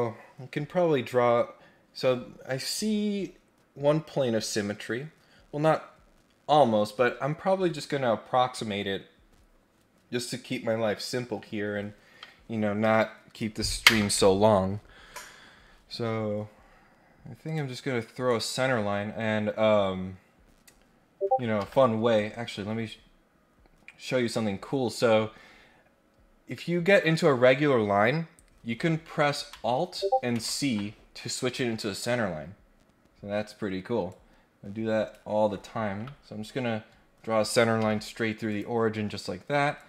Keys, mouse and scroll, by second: 17.4 click, 18.2 click, 21.5 Escape, 22.1-26.9 right drag, 34.1-35.1 drag, 37.8 Escape, 38.5 click, 39.7 click.